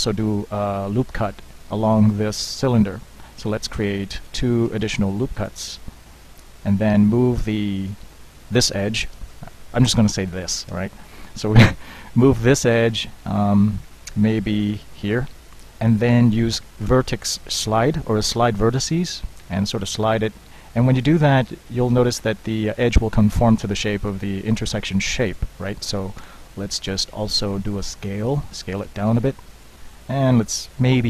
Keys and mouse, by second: 0.3 ctrl+r, 5.0 ctrl+r, 7.8 click, 8.1-9.3 middle drag, 9.3 KP_1, 14.7-16.1 drag, 18.3 shift+v, 26.3 s.